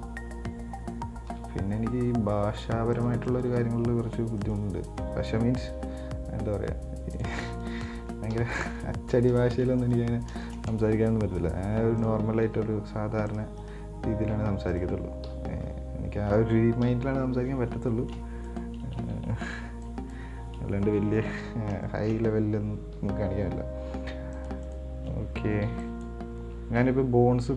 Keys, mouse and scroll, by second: 1.5 g, 3.5 right click, 4.6 right click, 5.1 right click, 6.1 g, 7.7 right click, 8.6 KP_1, 8.9-9.6 scroll up 1, 9.6 shift+middle click, 10.0 right click, 11.5 r, 12.7 g, 13.8 right click, 14.4 g, 15.5 KP_7, 17.0 KP_1, 17.8 scroll down 4, 18.1 shift+middle click, 18.7 right click, 19.8 b, 21.1 shift+middle click, 21.6-22.1 scroll up 4, 22.1-23.2 shift+middle drag, 23.2 g, 24.9 right click, 25.9 b.